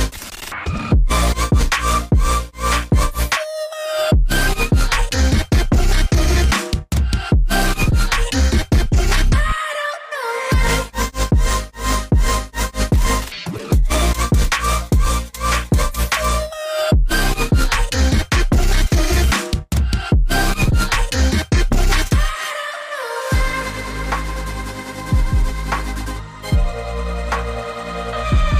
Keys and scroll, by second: 1.1 ctrl+z, 1.2 ctrl+z, 1.8 ctrl+shift+], 12.2 ctrl+shift+], 21.7 g.